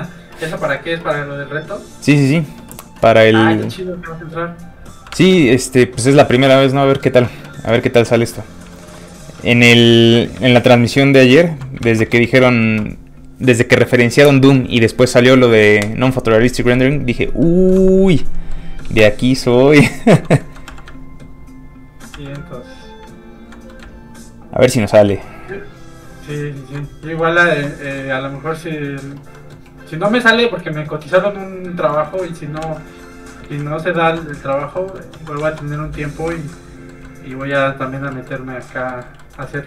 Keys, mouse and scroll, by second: 5.1 alt+Tab, 7.0 alt+click, 8.2 click, 8.3 middle click, 8.7 shift+middle click, 9.2 f, 9.4 click, 9.5 shift+middle click, 9.8 middle click, 9.9 alt+shift+middle click, 10.7 ctrl+shift+click, 11.9 ctrl+click, 12.0 ctrl+z, 12.3 shift+middle click, 17.5 shift+middle click, 17.9 middle click, 18.0 scroll up 1, 18.2 shift+middle click, 18.4 middle click, 18.5 middle click, 19.0 shift+space, 20.1 shift+click, 20.4 shift+middle click, 20.7 middle click, 20.8 click, 21.0 ctrl+click, 22.2 click, 22.3 click, 22.6 ctrl+click, 23.7 click, 24.2 ctrl+click, 27.2 middle click, 27.7 scroll down 1, 28.8-29.4 scroll down 1, 29.4 middle click, 30.6 click, 32.7 ctrl+z, 33.1 middle click, 34.0 ctrl+shift+z, 34.3 shift+middle click, 34.4 middle click, 35.2 ctrl+z, 35.5 shift+middle click, 35.8 middle click, 35.9 middle click, 36.2 ctrl+shift+z, 36.7 middle click, 37.1 shift+middle click, 37.4 middle click, 37.5 middle click, 38.0 scroll down 1, 38.4 scroll up 2, 38.6 middle click, 38.9 shift+middle click, 39.2 middle click, 39.3 middle click, 39.5 shift+middle click.